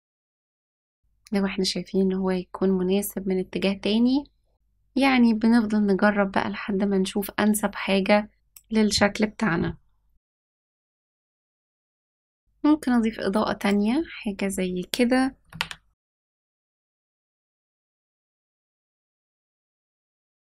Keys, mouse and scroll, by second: 12.4 ctrl+s, 12.7 shift+a, 18.7 g, 19.7 s.